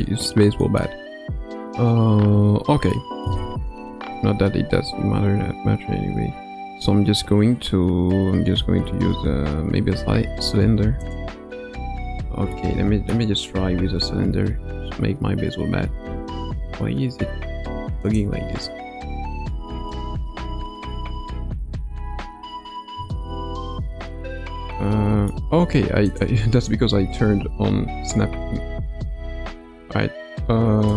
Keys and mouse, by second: 0.6 middle drag, 2.1 n, 2.9-3.3 middle drag, 3.8 shift+a, 12.5-13.1 middle drag, 13.7 g, 19.2 KP_Decimal, 19.5 middle click, 20.8 g, 24.7 middle click, 26.0 click, 28.2 g, 30.5 g.